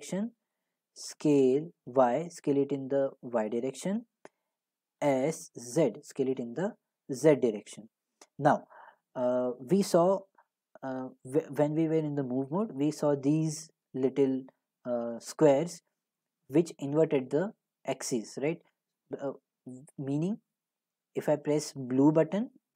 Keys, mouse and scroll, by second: 0.5-1.9 right drag, 1.2 s, 3.8 right click, 5.0 s, 5.8 s, 8.3 right click, 11.7 right click, 12.0-17.1 drag, 19.0-22.7 drag.